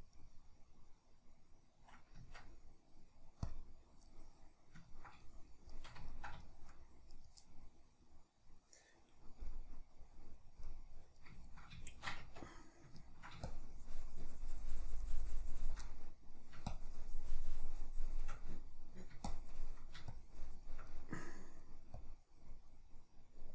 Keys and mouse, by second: 0.3-3.6 middle drag, 2.2 Tab, 3.6 click, 4.1-7.2 middle drag, 7.2 right click, 7.4-13.5 middle drag, 12.2 Tab, 13.5-15.9 shift+drag, 15.9 middle click, 16.7-18.4 shift+drag, 18.4 middle click, 19.3-20.9 shift+drag, 20.9-22.0 middle drag, 22.0 click, 22.7 middle click.